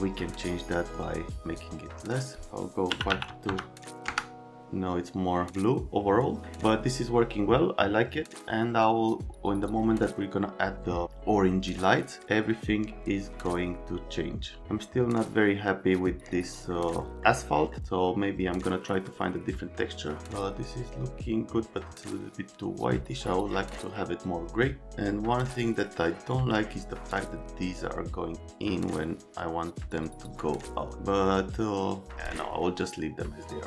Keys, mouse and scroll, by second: 2.2 click, 2.9 KP_5, 3.1 KP_2, 3.2 KP_0, 3.4 KP_0, 4.0 KP_Enter, 12.7 right click, 16.4 right click, 17.0 right click, 17.5 right click, 25.8 right click.